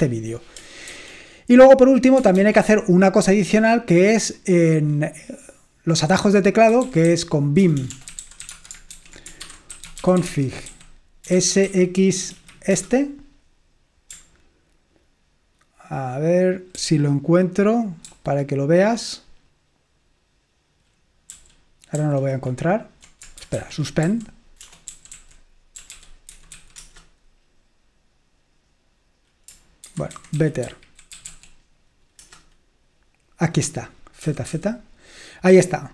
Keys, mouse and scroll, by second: 0.0 Escape, 1.1 ctrl+c, 2.5 ctrl+c, 6.6-12.9 typing, 16.8 ctrl+d, 18.2 ctrl+d, 21.4 ctrl+u, 22.1 ctrl+u, 23.3-27.1 typing, 29.9-31.8 typing, 32.3 Return, 33.2-35.0 typing.